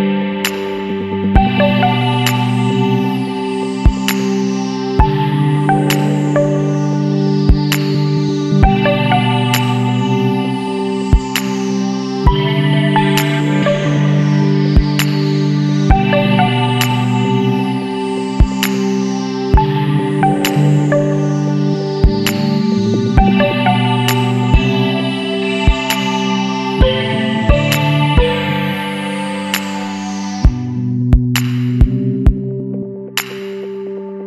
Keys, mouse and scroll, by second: 0.9 click, 1.7 click, 3.2 click, 5.8 click, 6.9 KP_2, 7.8 KP_1, 8.0 KP_0, 9.8 click, 12.0 click, 13.2 click, 14.4 KP_9, 14.6 KP_0, 16.4 click, 17.8 scroll up 1, 19.0 scroll up 1, 24.2 click, 24.6 Down, 25.0 Left, 25.6 scroll up 1, 26.0 Down, 26.3 Left, 26.8 Down, 26.9 Left, 29.6-29.9 scroll up 2, 30.5 scroll down 2, 31.2 scroll down 2, 34.0 click.